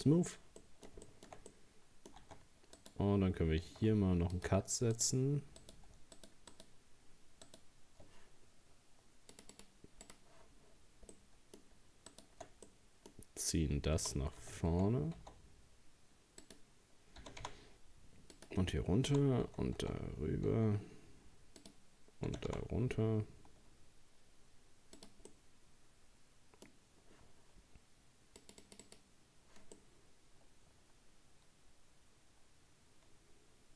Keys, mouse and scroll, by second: 0.6-2.3 middle drag, 2.3 Tab, 2.8 right click, 3.9 ctrl+r, 5.6 right click, 6.2 shift+right click, 6.5 shift+right click, 7.5 shift+right click, 9.3-11.1 drag, 11.1 middle click, 12.1 shift+right click, 12.7-14.0 middle drag, 14.0 g, 17.2 g, 19.1 g, 22.3 g, 25.3-28.3 middle drag, 28.4-29.8 drag, 29.8-32.8 middle drag.